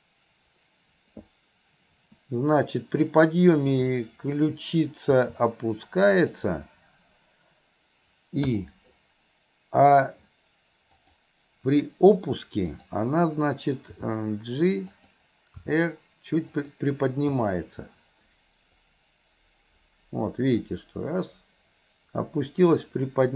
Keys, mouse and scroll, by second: 3.6 click, 11.1 click, 12.7 click, 18.9-23.3 drag.